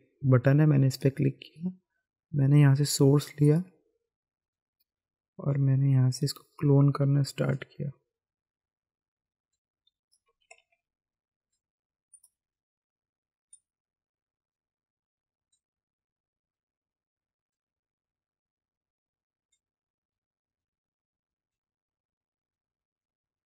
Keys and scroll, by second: 10.5 ctrl+z.